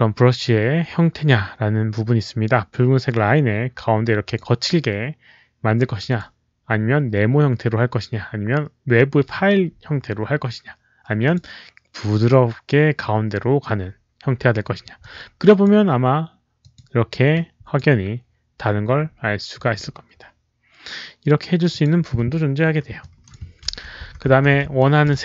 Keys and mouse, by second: 4.1 click, 6.0 click, 11.1 click, 14.9 click, 16.5 click, 17.2 click, 21.6 click, 22.9 alt+click, 23.5 ctrl+z, 24.2 ctrl+z, 24.7 alt+click.